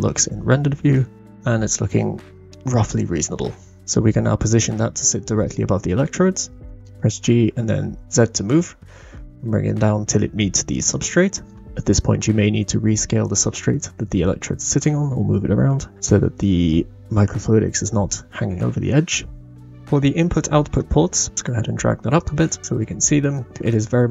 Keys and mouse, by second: 0.9-2.5 middle drag, 3.4-3.8 middle drag, 6.7 g, 15.7 g, 16.0-17.8 middle drag, 21.3 g, 22.6-23.3 middle drag.